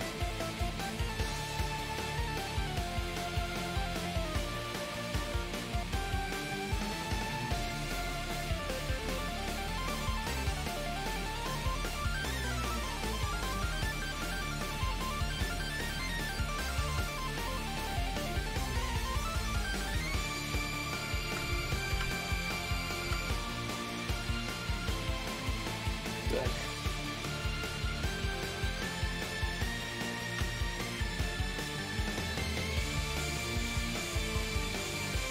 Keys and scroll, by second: 25.7 shift+d, 27.2 shift+d.